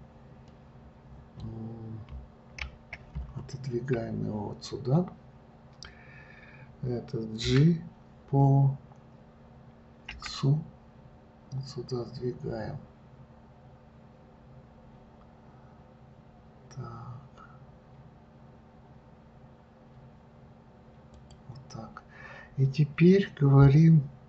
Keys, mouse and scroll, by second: 0.8-2.5 middle drag, 2.5 KP_3, 3.0 KP_1, 7.8 g.